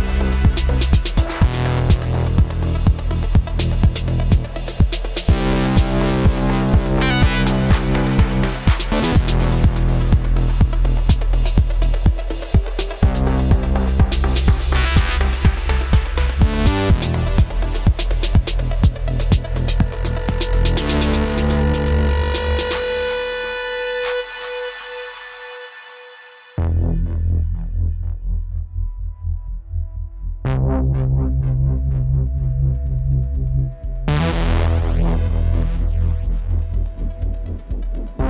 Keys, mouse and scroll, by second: 9.3-10.5 typing, 19.5 alt+click, 30.9 typing.